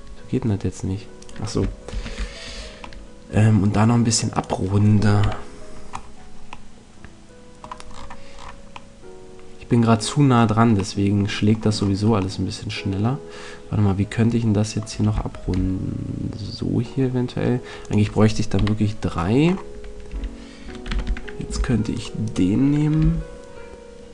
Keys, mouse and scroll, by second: 1.9 ctrl+z, 1.9 right click, 5.1 right click, 5.2 KP_Decimal, 8.9-14.3 middle drag, 15.3 ctrl+r, 17.9 click, 18.5 KP_3, 19.4 middle click, 20.1 a, 20.8 z, 21.5 c, 22.3-24.0 right drag, 22.9 g.